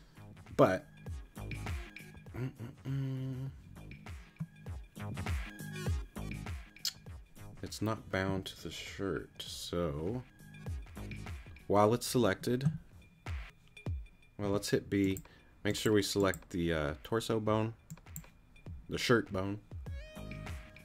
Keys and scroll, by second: 14.4 b.